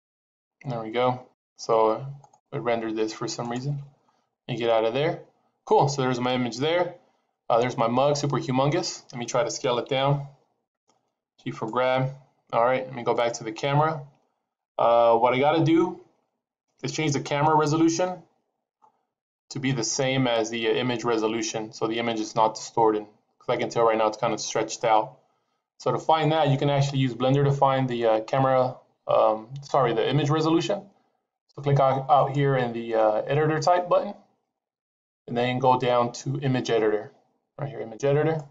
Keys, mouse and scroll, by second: 7.9 click, 9.7 s, 10.8 g, 13.0 click, 14.3-15.1 scroll down 1, 15.1-16.0 scroll down 1, 18.6-20.2 scroll up 4, 32.1 click.